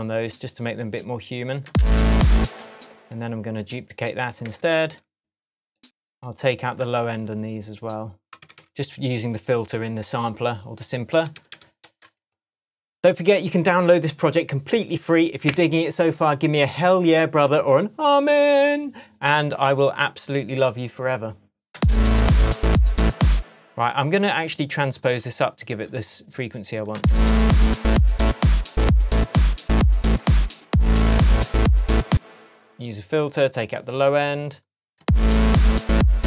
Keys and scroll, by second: 1.6 super+space, 2.4 space, 4.4 BackSpace, 8.4 super+d, 12.2 shift+super+d, 12.3 shift+super+Tab, 13.0 shift+Tab, 21.7 space, 23.3 space, 26.9 space, 32.0 space, 35.0 space.